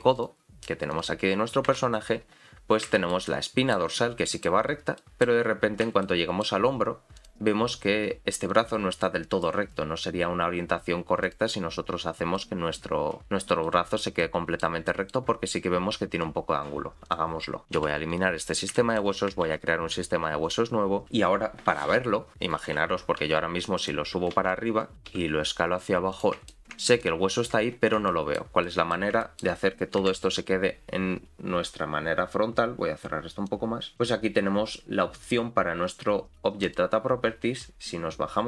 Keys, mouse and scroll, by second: 0.9 click, 1.7 KP_Decimal, 2.3-2.6 scroll down 2, 2.8 scroll down 6, 3.0 shift+middle click, 3.3 middle click, 4.0 middle click, 5.0 middle click, 5.5-6.0 scroll up 2, 6.0 shift+middle click, 7.2 click, 8.5 click, 11.2 click, 11.9-12.5 scroll down 3, 12.3 middle click, 13.6 middle click, 14.2 middle click, 14.9 middle click, 17.1 click, 17.6 click, 17.8 x, 18.4-18.7 scroll down 3, 18.7 shift+middle click, 19.5 shift+a, 26.5 shift+middle click, 27.0 middle click, 27.7-28.1 scroll up 3, 28.1 shift+middle click, 28.6 middle click, 29.2 shift+middle click, 30.0 KP_Decimal, 30.7-32.4 scroll down 1, 33.5 click, 33.5-33.9 scroll down 3, 34.3-36.6 scroll down 4, 36.6 click, 38.0 scroll down 1.